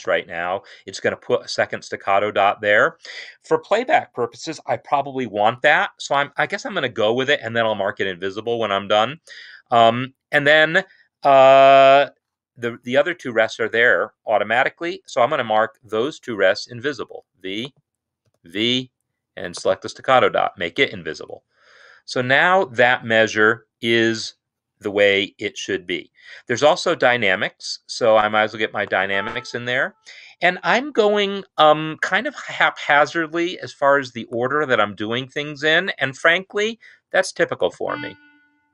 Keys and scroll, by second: 0.2 shift+s, 12.6 Escape, 16.7 v, 18.2 typing, 20.0 typing.